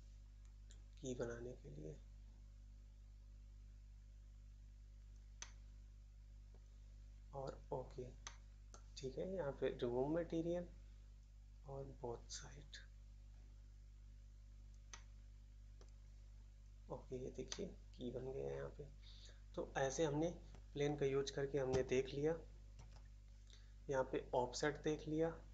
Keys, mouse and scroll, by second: 5.3 middle click, 6.5 middle click, 8.2 middle click, 8.7 middle click, 14.9 middle click, 15.7 middle click, 17.4 middle click, 19.2 middle click, 19.9-20.2 scroll up 1, 22.7 shift+s.